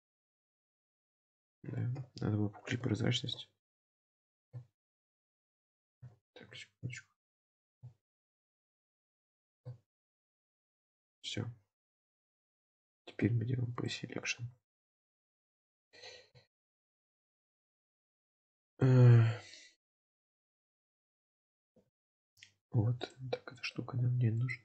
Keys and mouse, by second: 2.0 KP_7, 3.1 shift+middle click, 3.5 alt+z, 4.2 click, 6.2 ctrl+z, 6.8 ctrl+z, 7.6 alt+z, 8.3 shift+click, 9.5 3, 10.1 shift+click, 11.2-12.2 middle drag, 12.3 alt+z, 13.2 p, 14.4 Tab, 14.8 click, 15.1-15.9 middle drag, 16.5 shift+middle drag, 17.7-18.1 shift+middle drag, 18.5-18.8 shift+middle drag, 20.1 shift+middle click, 22.0 shift+middle click, 24.4 click.